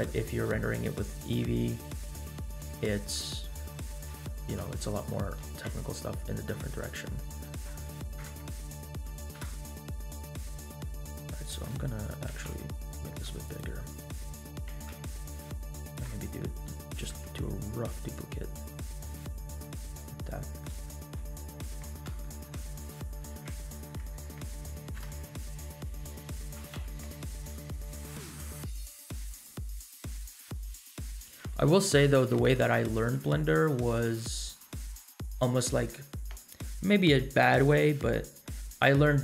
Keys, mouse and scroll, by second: 0.1-0.5 middle drag, 0.8-1.2 scroll up 2, 1.2 middle drag, 1.6 scroll down 1, 2.4 Tab, 2.7 middle click, 3.3 scroll up 2, 4.3 shift+middle click, 4.8 middle click, 5.3 3, 6.3 alt+click, 6.8 middle click, 8.1 alt+KP_Add, 9.4 alt+KP_Add, 10.0 middle click, 10.8-11.4 scroll down 3, 11.4 middle click, 12.2 s, 14.5 g, 16.1 middle click, 17.1 shift+d, 20.0 Tab, 20.0 scroll down 1, 20.3 middle drag, 20.8 shift+middle click, 21.2 scroll up 1, 21.8 Tab, 21.9 scroll up 1, 22.3 shift+middle click, 23.2 3, 23.7 alt+click, 25.0 ctrl+KP_Add, 26.5 s, 28.3 s, 28.4 g, 29.6 scroll down 1, 29.9 middle click, 32.4 shift+d.